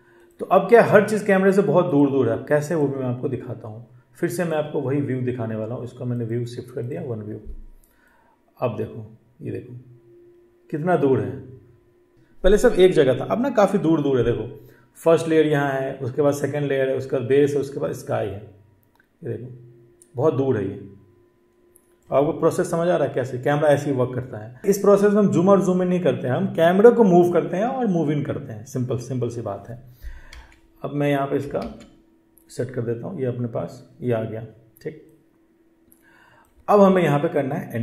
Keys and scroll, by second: 30.1 ctrl+z, 31.4 ctrl+z.